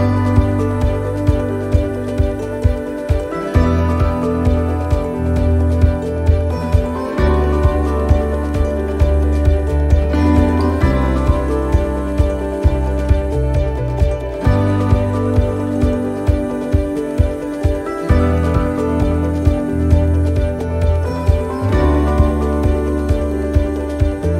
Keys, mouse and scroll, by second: 0.0 click, 1.9 shift+d, 3.0 click, 6.8 shift+d, 7.9 click, 12.5 right click, 13.5-16.2 typing, 17.7 shift+d, 19.0 click, 23.9 middle click.